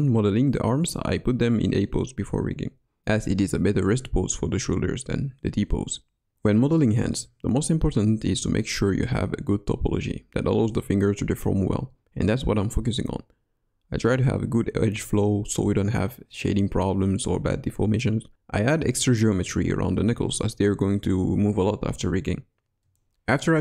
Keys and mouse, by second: 0.3 middle click, 1.8 e, 4.5-5.6 drag, 5.7 g, 6.3-8.6 middle drag, 7.2 ctrl+r, 9.1 s, 10.4 middle click, 10.8 click, 11.6 click, 12.6 click, 13.7 click, 14.4-15.4 drag, 15.4 middle click, 16.0 middle click, 16.5 middle click, 17.2 click, 17.4 click, 17.5-18.1 middle drag, 18.2 middle click, 18.3 ctrl+b, 21.1 middle click, 22.1 1.